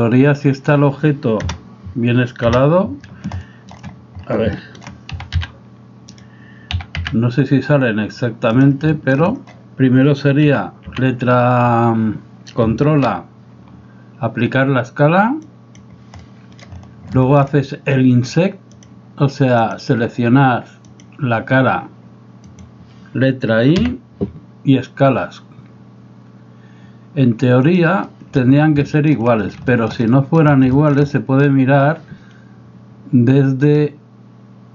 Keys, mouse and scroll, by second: 1.4 KP_0, 2.6 KP_0, 3.4-3.8 shift+drag, 4.6 shift+drag, 5.2 s, 6.7 s, 8.9 shift+middle drag, 9.0 shift+click, 10.5 n, 11.0 n, 12.9 ctrl+a, 16.3-16.7 middle drag, 17.1 shift+middle drag, 18.9-19.9 drag, 21.0 click, 22.5 right click, 23.9 i, 28.1 middle drag, 28.9 shift+middle drag, 29.7 shift+middle drag, 30.1 middle click, 30.8 shift+middle click, 31.2 middle click.